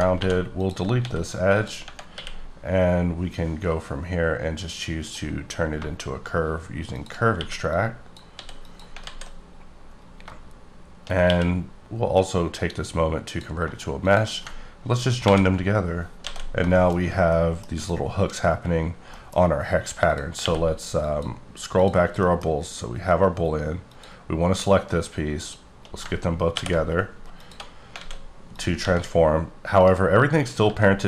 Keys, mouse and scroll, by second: 0.2 2, 0.6 click, 1.0 x, 1.5 click, 1.8 Tab, 2.1 q, 5.0 click, 6.9 shift+click, 7.4 q, 7.7 click, 8.3 s, 8.6 click, 9.0 alt+z, 9.2-10.1 alt+scroll down 12, 11.3 q, 13.3 click, 15.2 ctrl+j, 16.2 alt+a, 16.5 scroll down 2, 16.7 shift+middle click, 17.0 scroll up 2, 17.3 middle click, 17.7 scroll up 2, 18.5-19.1 scroll down 5, 19.1 middle click, 20.0 click, 20.4 q, 21.0 click, 21.8 click, 22.2 middle click, 22.5-23.1 scroll up 2, 23.9 click, 26.1 ctrl+click, 26.5 ctrl+p, 27.4 click, 28.0 alt+a, 28.2-28.5 scroll down 2, 28.5 click, 28.8 g, 29.7 right click, 30.2-30.6 scroll down 5, 30.6 g.